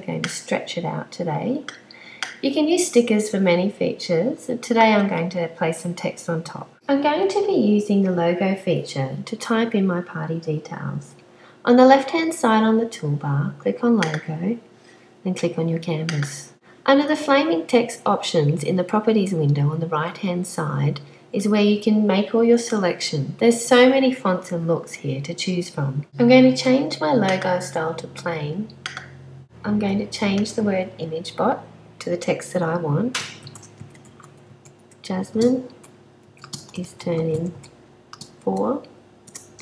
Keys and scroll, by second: 33.8-38.4 typing, 39.4-39.6 typing.